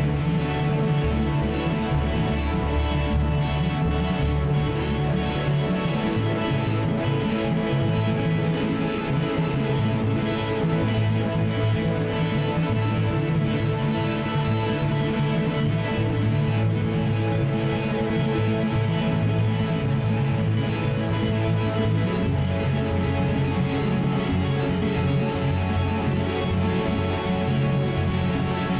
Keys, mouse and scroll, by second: 0.0 g, 6.5 F4, 7.2 F4, 7.2 middle click, 9.4 middle click, 11.4 alt+k, 22.9 alt+k, 24.2-25.4 middle drag, 24.7 z, 25.4-28.2 right drag, 28.3 alt+k.